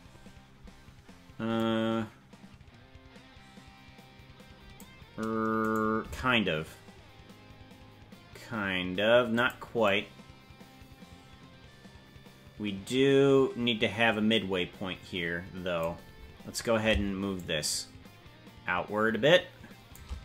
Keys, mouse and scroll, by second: 0.2 scroll up 2, 1.6-4.8 drag, 5.6 right click, 6.0 g, 9.8-15.8 drag, 17.3-20.0 shift+drag.